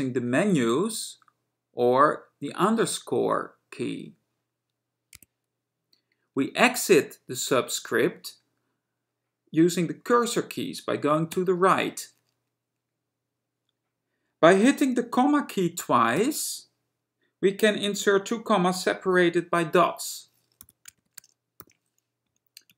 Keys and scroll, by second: 4.3 _, 11.4 Right, 16.0 ,, 20.8-22.7 typing, 22.3 Right.